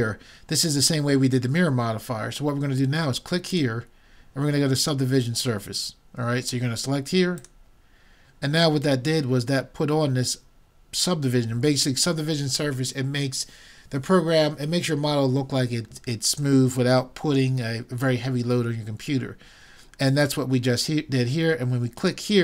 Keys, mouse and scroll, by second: 3.5-5.2 drag, 22.0-22.4 drag.